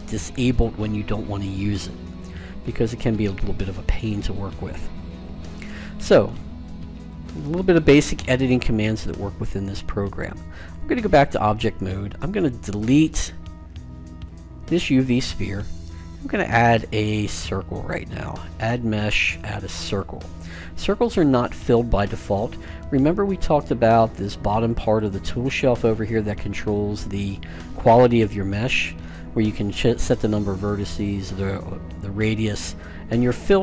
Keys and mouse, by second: 3.7-7.4 middle drag, 7.5-9.0 middle drag, 10.4 click, 11.3-12.3 drag, 12.3-14.1 middle drag, 14.1 Delete, 15.9 space, 24.2 click, 25.6 click, 33.2-33.6 drag.